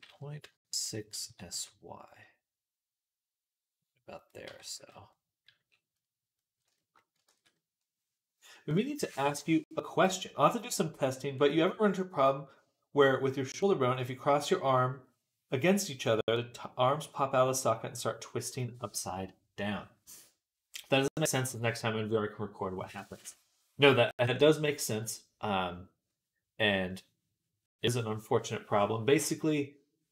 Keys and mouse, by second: 1.1 s, 4.2 middle click, 4.3 Tab, 4.6 z, 4.9-6.5 middle drag, 6.5-30.1 shift+drag, 7.1 ctrl+s.